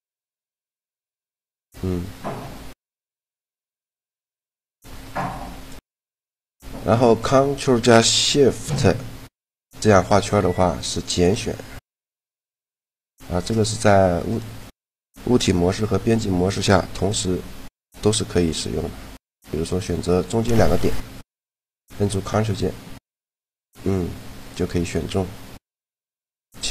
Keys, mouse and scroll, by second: 1.5-3.4 drag, 3.1 right click, 3.4-4.7 middle drag, 5.0-8.0 drag, 10.8-13.7 drag, 13.4 middle click, 14.0-16.0 drag, 15.5 Tab, 16.1 middle click, 16.8 z, 22.0-23.6 drag, 23.8-25.3 middle drag.